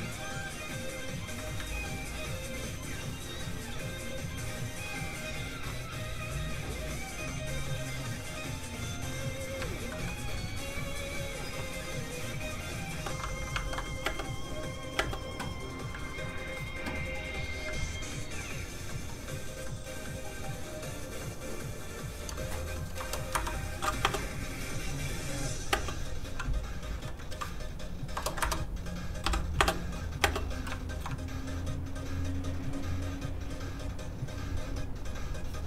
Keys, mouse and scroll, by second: 1.6 ctrl+click, 6.3 click, 6.5 click, 7.1 f, 7.3 click, 9.9 middle click, 10.0 shift+middle click, 11.4 shift+space, 13.5 ctrl+Tab, 14.0 Tab, 14.1 space, 16.0 click, 22.9 KP_0, 23.3 Return, 24.0 space, 26.8 click, 28.1 KP_0, 28.4 Return, 29.2 i, 29.5 space, 31.5 click.